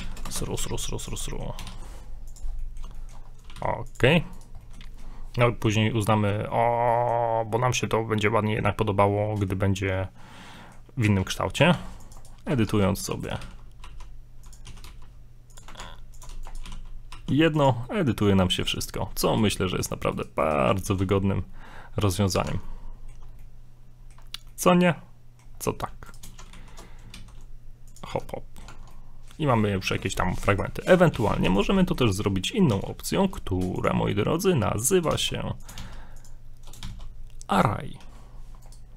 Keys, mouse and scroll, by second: 0.6 g, 1.3 middle click, 1.6 s, 2.5 scroll down 4, 2.6 middle click, 3.0 shift+middle click, 3.2 scroll up 4, 3.5 g, 4.4 right click, 4.6 middle click, 4.9 shift+middle click, 5.4 scroll up 1, 5.5 middle click, 6.7 scroll down 2, 6.9 middle click, 7.3-7.6 scroll up 1, 7.7 middle click, 8.9 scroll up 1, 9.1 middle click, 10.3-10.6 scroll down 2, 10.6 middle click, 11.1 Tab, 11.7 ctrl+r, 12.6 ctrl+Tab, 13.3 right click, 13.4 g, 14.6 e, 15.8 ctrl+Tab, 16.4 right click, 16.6 right click, 16.6 g, 17.8 middle click, 18.4 shift+middle click, 19.3 right click, 19.5 middle click, 20.4 right click, 20.9 ctrl+b, 22.5 Tab, 22.7 middle click, 22.7 scroll down 1, 23.2 scroll up 1, 23.3 scroll down 2, 23.4 middle click, 24.2 scroll up 1, 24.5 middle click, 25.6 scroll down 3, 26.1 right click, 26.3 shift+d, 28.1 Tab, 28.2 middle click, 28.7 Tab, 28.9 middle click, 29.5-29.8 scroll down 2, 29.8 middle click, 30.5 right click, 31.2 a, 31.3 a, 31.5 x, 31.8 middle click, 32.7 shift+a, 35.1 shift+s, 35.8 shift+s, 36.8 shift+s, 38.0 a, 38.7 right click.